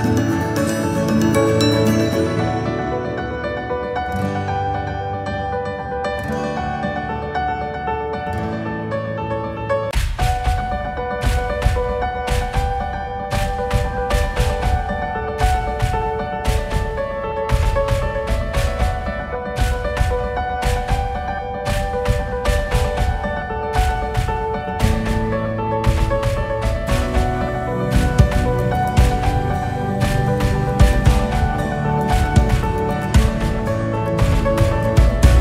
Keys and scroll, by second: 0.4 Delete, 12.3 shift+Delete, 14.4 ctrl+s.